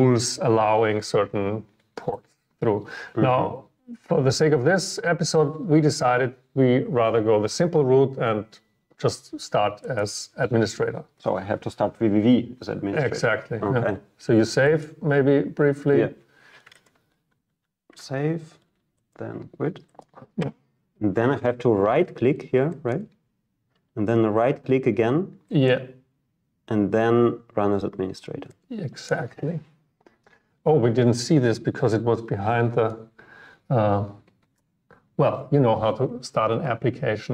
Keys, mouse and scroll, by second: 2.4 click, 2.9 click, 3.9 click, 10.1-12.2 drag, 14.9-17.0 drag, 17.6 ctrl+s.